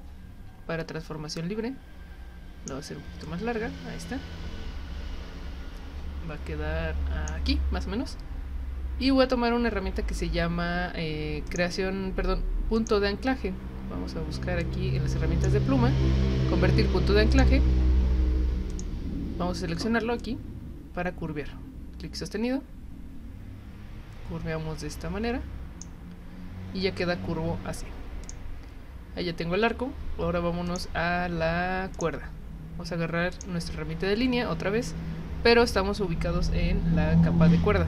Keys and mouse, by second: 1.3-2.7 drag, 3.2-7.2 drag, 11.5 click, 12.7 click, 14.6 click, 17.3 click, 18.7 click, 20.2-25.8 drag, 28.2 click, 30.7 click, 31.9 click, 33.3 click.